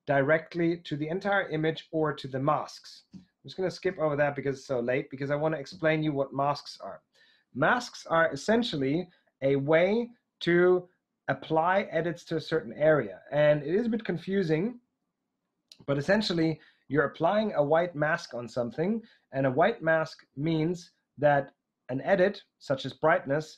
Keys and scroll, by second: 1.3 Right, 2.9 Right, 14.7 Right.